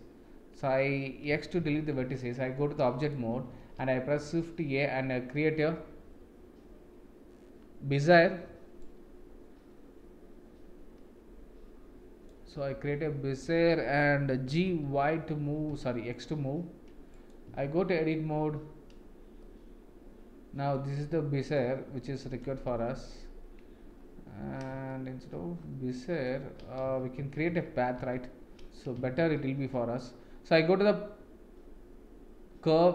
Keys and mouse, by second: 1.2 x, 2.1 Tab, 3.5 shift+a, 14.4 g, 17.9 Tab, 19.4-20.7 middle drag, 21.0 middle click, 22.6 a, 24.9 shift+middle click, 25.9 middle click, 26.9 ctrl+z, 27.2 ctrl+z, 27.5 ctrl+z, 28.0 ctrl+z, 29.1 shift+a.